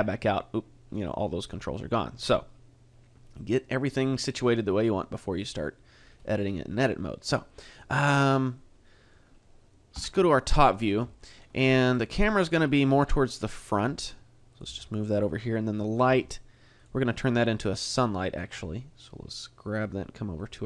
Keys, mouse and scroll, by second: 1.0 click, 3.4 middle click, 6.1-6.4 scroll down 2, 6.4 middle click, 7.5 middle click, 8.6 middle click, 9.9 KP_7, 10.8-11.1 scroll down 2, 11.1 shift+middle click, 12.2 g, 12.7 click, 13.0 r, 13.6 click, 13.8 r, 14.6 click, 14.6 g, 15.2 click, 15.8 right click, 16.1 g, 16.8 click, 18.1 click, 20.4 click.